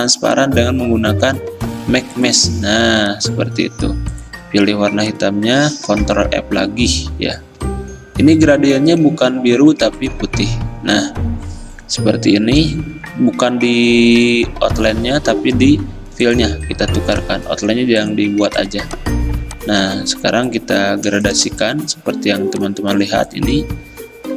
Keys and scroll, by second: 6.0 ctrl+f, 19.9 g.